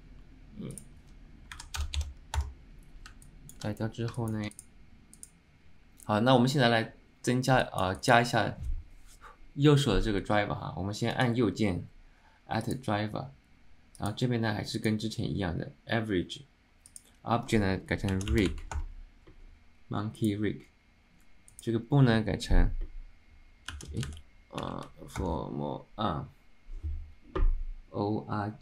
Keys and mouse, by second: 3.3-3.7 alt+middle drag, 4.3 alt+middle click, 5.3 click, 7.7 alt+middle click, 8.1 alt+shift+middle drag.